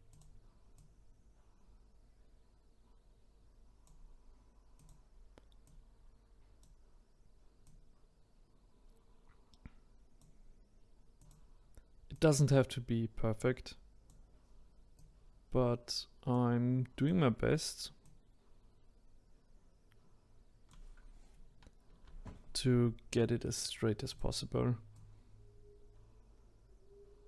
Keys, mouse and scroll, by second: 0.1 drag, 0.7 click, 4.7 click, 5.6 click, 7.6 click, 11.2 click, 12.1 click, 14.9 click, 16.9 click, 18.0 click, 21.9 ctrl+z, 24.1-25.2 drag.